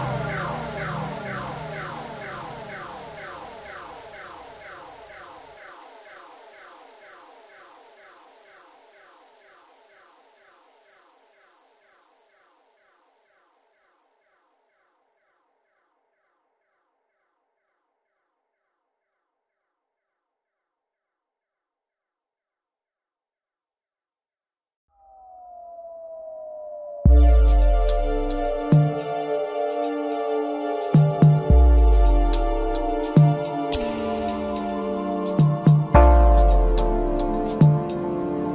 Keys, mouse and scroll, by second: 1.6-2.7 drag, 2.7-3.8 scroll up 1, 3.8 click, 4.2 scroll up 2, 5.3 e, 6.1 s, 8.8 s, 10.3 e, 11.6-12.4 scroll down 2, 12.4-13.7 middle drag, 13.7-14.9 scroll up 1, 14.9 ctrl+r, 17.7 click, 18.8 s, 23.1 g, 25.8-28.9 scroll down 6, 31.1 KP_1, 32.8 ctrl+KP_4, 33.1 ctrl+KP_4, 33.2 ctrl+KP_4, 33.4 ctrl+KP_4, 34.3-35.2 scroll down 2, 35.2-38.3 scroll up 2.